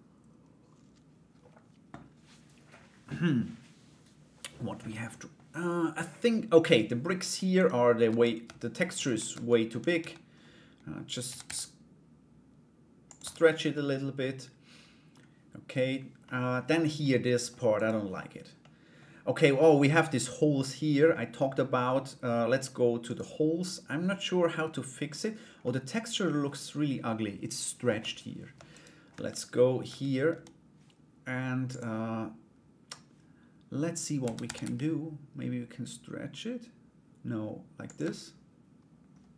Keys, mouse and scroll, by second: 4.4 middle click, 6.1 middle click, 7.1 right click, 7.6 Tab, 8.6 shift+right click, 9.5 a, 10.8 a, 11.0 s, 12.8 Tab, 13.3-14.7 middle drag, 15.8 middle click, 16.7 middle click, 17.3 right click, 18.2 middle click, 20.2 middle click, 22.6 right click, 23.2 middle click, 24.7 right click, 25.2 middle click, 27.5 Tab, 28.3 right click, 28.7 /, 29.4 Tab, 29.9 a, 31.3 click, 34.0 s, 37.6 Tab.